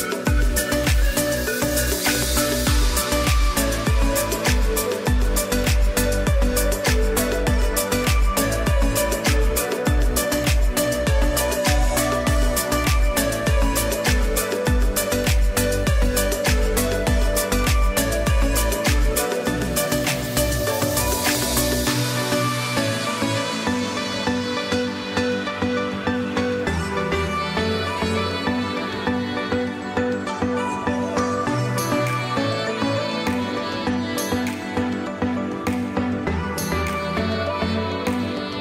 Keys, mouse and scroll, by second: 0.3 space, 0.5 click, 1.0 space, 1.3 click, 1.4 space, 1.7 click, 2.4 click, 3.1 space, 3.3 click, 3.8 space, 4.1 click, 4.3 space, 4.5 click, 5.3 space, 5.5 click, 13.8 z, 14.4 click, 15.6 space, 15.9 click, 16.3 space, 16.8 click, 17.4 space, 17.7 click, 18.2 space, 21.2 click, 26.1 click, 29.3 click, 29.7 z, 30.3 click, 30.5 space, 30.8 click, 31.3 space, 33.5 ctrl+shift+click, 34.5 ctrl+e, 35.6 click.